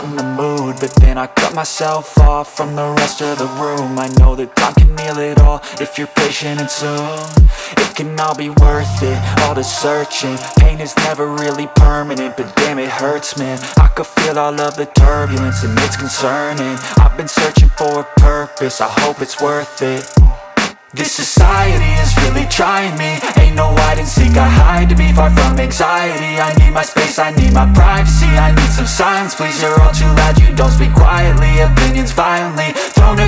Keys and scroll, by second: 0.0 space, 7.6 F3, 8.1 F2, 12.8 Caps_Lock, 13.6 s, 14.7-17.5 typing, 18.0 ctrl+space, 22.6 c, 23.0 Escape, 23.3 F2, 26.3 F3, 27.4 F2.